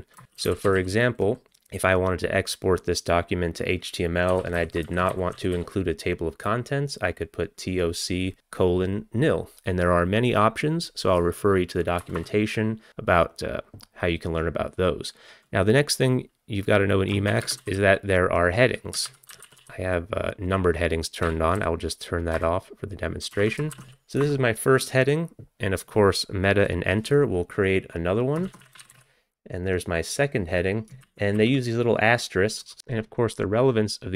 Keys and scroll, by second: 0.0-1.5 typing, 4.1-6.1 typing, 12.0 Return, 12.2 Return, 17.4-20.1 typing, 19.1 alt+x, 21.3-21.6 typing, 22.4 Return, 23.4-24.4 typing, 28.3-29.7 typing, 31.1 ctrl+p, 31.4 ctrl+p, 32.8 alt+Return.